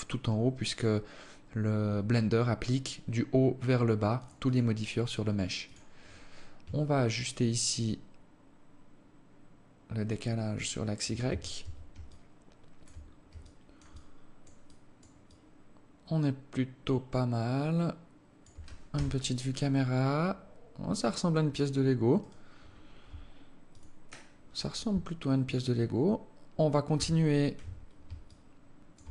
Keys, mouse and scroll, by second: 3.9 click, 4.1 click, 5.3 click, 6.7 shift+click, 10.9 Tab, 11.2 Tab, 11.7 alt+click, 12.6-13.0 scroll down 2, 13.0 alt+click, 13.5 alt+click, 14.2 alt+click, 14.9 alt+click, 18.5 KP_0, 21.8 right click, 22.8 g, 26.5 KP_7, 27.9 alt+shift+click.